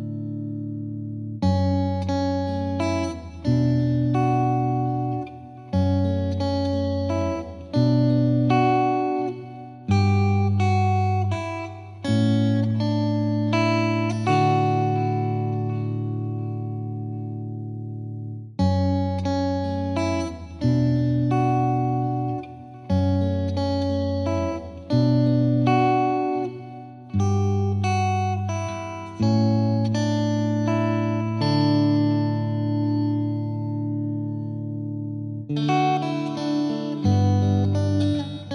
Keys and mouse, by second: 0.2 click, 1.2 click, 2.4 click, 6.1 click, 6.8 click, 8.1 Delete, 12.5 click, 14.7-16.0 drag, 18.6-19.8 drag, 21.9-23.0 drag, 24.8 click, 28.0-29.2 drag, 30.3-31.5 drag, 34.5-35.7 drag, 37.2 click.